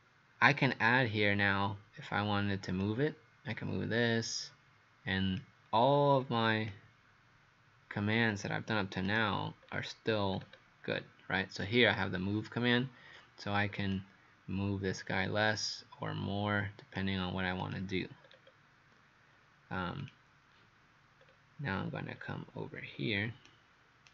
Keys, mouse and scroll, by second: 2.8 click, 9.6-10.3 scroll down 2, 10.3 scroll down 1, 14.0 click, 18.3 scroll down 2, 20.1 click, 21.2-21.6 scroll down 2, 22.2-22.5 scroll up 1, 22.9 scroll up 2, 22.9-23.5 scroll down 2, 23.5 right click.